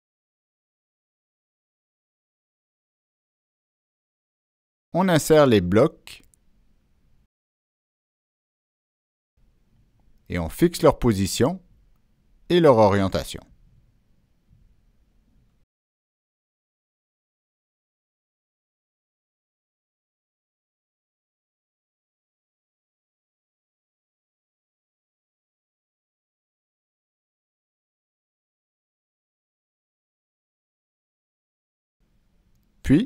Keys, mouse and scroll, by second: 0.2 click, 1.0 scroll up 1, 1.4 scroll down 1, 2.0 click, 2.9 Escape, 3.5 scroll up 1, 4.1 click, 4.2 Escape, 4.5 click, 6.3 click, 8.3 click, 8.9 click, 10.0 click, 11.4 Escape, 11.5 Escape, 12.7 click, 14.0 click, 14.3 Escape, 14.5-14.9 scroll down 2, 14.9 middle click, 14.9 Escape, 15.3-16.0 drag, 16.4 click, 17.7 middle click, 18.4-19.1 drag, 20.2 click, 21.1 click, 22.5 click, 23.6-24.2 drag, 24.6 click, 25.6 click, 26.0 click, 27.2-27.7 drag, 28.3 click, 28.9 middle click, 29.8 ctrl+z, 30.4 click, 31.2 click, 31.5 ctrl+z, 31.5 middle click, 32.7 click.